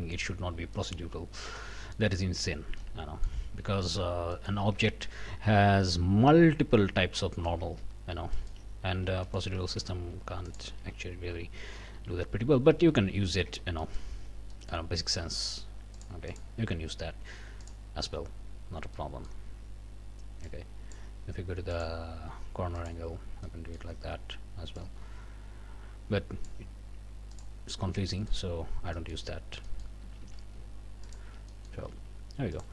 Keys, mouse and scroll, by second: 0.8 middle click, 1.1 scroll up 1, 1.6 middle click, 2.8 middle click, 3.6 a, 4.0 scroll down 1, 4.3 middle click, 4.8 Tab, 5.0 scroll up 1, 7.3 middle click, 7.6 Tab, 8.0-9.2 scroll up 4, 8.4 shift+middle click, 9.2 shift+middle click, 9.6 shift+a, 10.5 alt+click, 11.7 g, 12.9 Escape, 13.3 middle click, 13.5 Tab, 13.8 click, 14.5 middle click, 15.9 click, 17.6 click, 19.0 middle click, 20.5 click, 21.7 click, 22.8 click, 23.4 click, 24.8-26.6 drag, 27.3 click, 27.9 Tab, 28.2 click, 28.5 scroll up 1, 28.9 shift+click, 29.7 click, 30.0 a, 31.1 alt+click, 31.5 alt+click, 32.5 alt+shift+click.